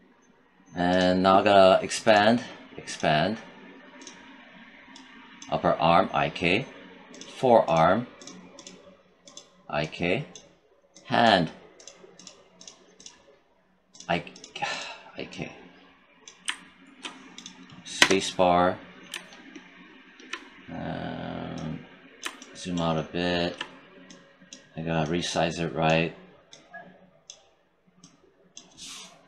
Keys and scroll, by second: 17.9 space.